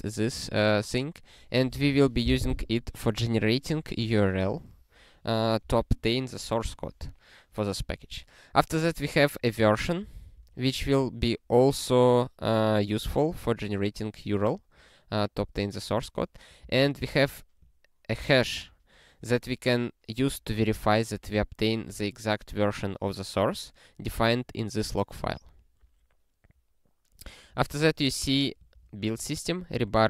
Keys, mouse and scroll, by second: 0.5 click, 9.1 click, 9.8 ctrl+alt+@, 10.3 ctrl+g, 16.0 click, 16.6 ctrl+b, 17.0 ctrl+alt+@, 18.2 ctrl+g, 27.5 click, 28.2 ctrl+alt+@, 28.7 ctrl+g.